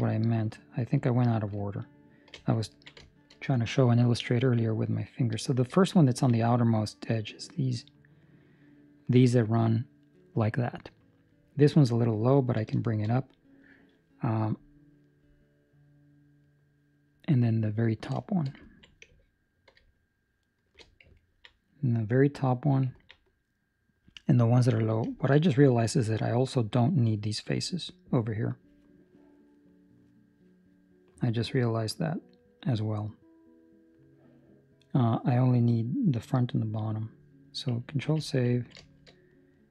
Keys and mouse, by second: 0.2 alt+shift+right click, 0.8 alt+shift+right click, 1.6 alt+shift+right click, 2.2 alt+shift+right click, 2.7 ctrl+middle click, 3.0 shift+middle click, 6.0 ctrl+middle click, 6.3 middle click, 12.2 ctrl+middle click, 12.8 shift+middle click, 13.7 middle click, 17.8 ctrl+middle click, 18.1 shift+middle click, 18.6 ctrl+middle click, 20.4 alt+shift+right click, 21.2 ctrl+middle click, 21.6 middle click, 22.9 ctrl+middle click, 23.2 middle click, 25.0 shift+middle click, 25.4 middle click, 27.4 middle click, 29.0 middle click, 35.6 middle click, 38.0 ctrl+s, 38.6 ctrl+middle click, 38.8 shift+middle click, 39.1 middle click.